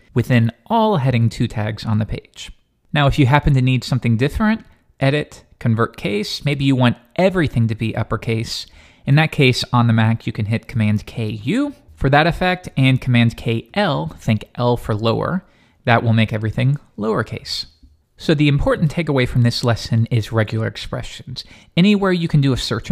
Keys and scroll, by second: 13.4 super+k, 13.7 super+l.